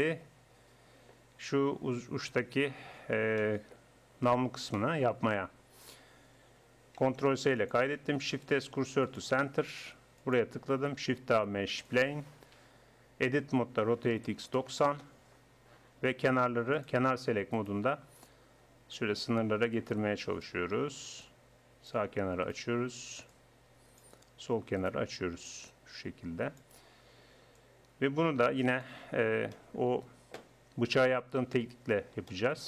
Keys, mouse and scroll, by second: 0.9 middle click, 1.5 middle click, 2.9 click, 3.1 middle click, 4.1 middle click, 7.3 ctrl+s, 8.3 shift+s, 11.0 shift+a, 13.3 Tab, 13.9 r, 21.9-23.3 drag, 25.2 click, 26.7-29.3 drag, 29.3 middle click, 29.6-32.6 drag.